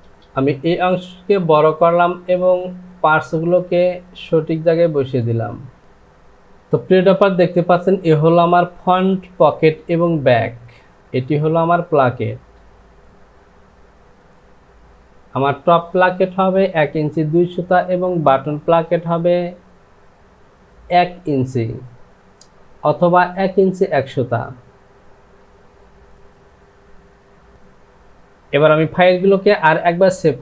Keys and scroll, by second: 5.8 Home, 27.5 j.